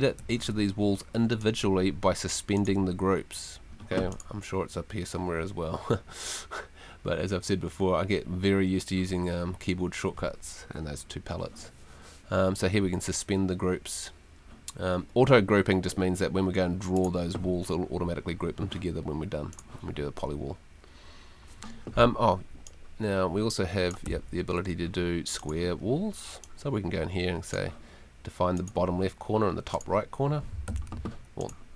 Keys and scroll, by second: 0.2 Escape, 24.0 Escape, 30.7 super+z.